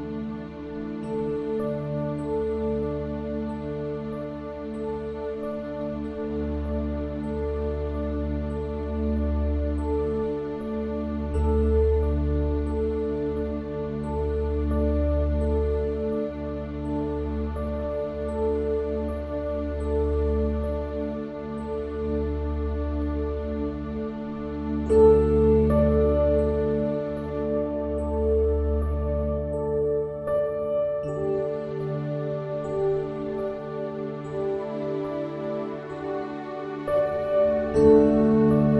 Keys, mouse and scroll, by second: 2.6 shift+d, 4.4-10.2 drag, 10.2-15.1 middle drag, 13.7 shift+a, 20.0-21.9 drag, 30.2 s, 33.1 click, 34.0 click, 35.5 s, 38.2-38.7 drag.